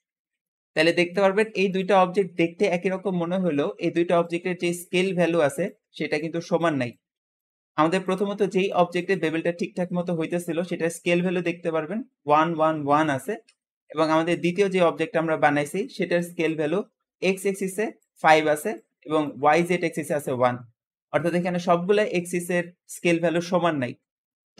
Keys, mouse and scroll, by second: 0.3 Tab, 0.4 Tab, 0.4 middle click, 0.6-1.0 scroll up 1, 1.0 click, 1.6 click, 3.9 `, 4.0 `, 13.2 Escape, 14.2 click.